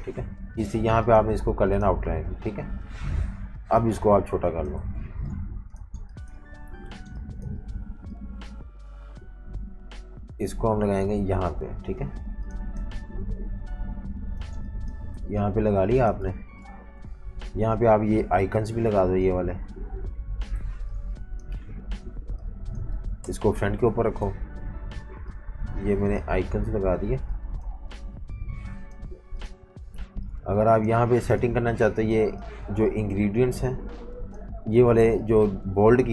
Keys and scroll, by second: 4.9-7.0 typing, 13.3 super+-, 13.5 super+-, 14.4-16.2 typing, 17.0 super+-, 17.1 super+-, 20.6-22.2 typing, 23.2 shift+super+], 24.2 super+g, 30.0-31.2 typing, 34.7 super+3.